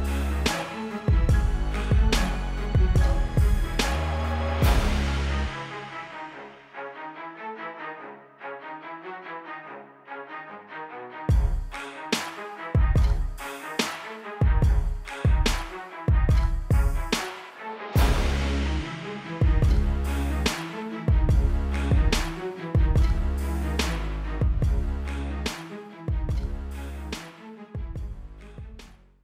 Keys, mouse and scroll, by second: 0.7 KP_Divide, 1.8 m, 2.2 click, 4.7 l, 5.4 click, 6.1 alt+BackSpace, 7.2 click, 7.9 alt+BackSpace, 9.3 click, 10.5 alt+BackSpace, 11.4 ctrl+d, 11.5-12.3 typing, 12.3 click, 13.9 ctrl+BackSpace, 14.9 ctrl+d, 15.0 ctrl+KP_0.